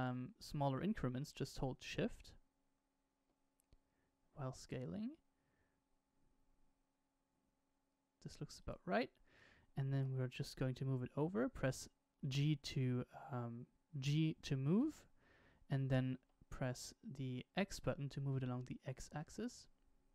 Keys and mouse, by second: 9.9 g.